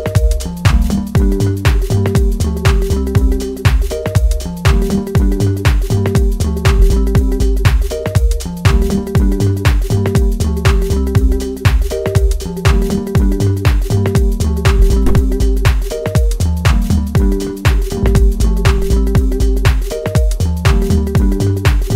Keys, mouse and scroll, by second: 0.6 click, 1.6-8.5 middle drag, 8.5 right click, 9.5 scroll down 1, 10.2-12.4 middle drag, 12.4-12.9 scroll up 1, 12.9-21.9 middle drag.